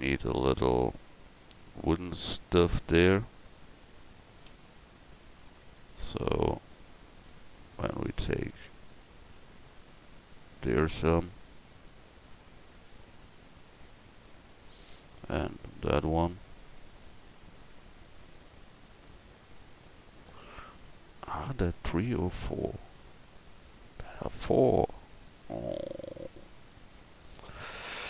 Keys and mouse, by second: 4.5 ctrl+r.